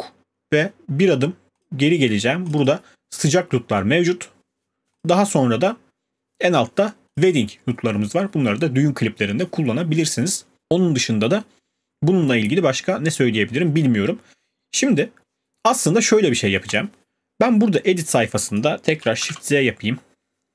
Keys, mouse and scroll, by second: 1.6 click, 2.5 click, 2.6 click, 5.0 click, 7.2 click, 16.7 click, 18.6 click, 19.2 z.